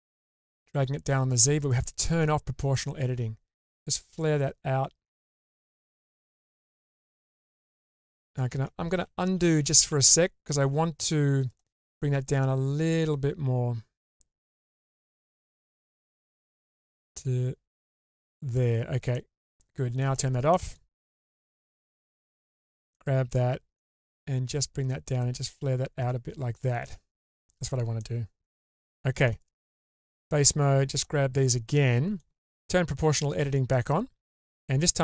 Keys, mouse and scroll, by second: 0.5 ctrl+z, 1.5 click, 2.8 click, 3.5 click, 6.0-8.5 middle drag, 9.0 ctrl+z, 9.5 ctrl+z, 9.9 ctrl+z, 11.5 click, 12.3 click, 12.5 click, 19.1 middle click, 20.1 click, 20.5 middle click, 21.2 2, 22.3 alt+click, 22.9 middle click, 24.5 click, 26.8 middle click, 27.7 scroll up 2, 28.0 middle click, 28.9 shift+middle click, 29.9 3, 30.6 click, 31.5 middle click, 33.1 click, 34.1 click.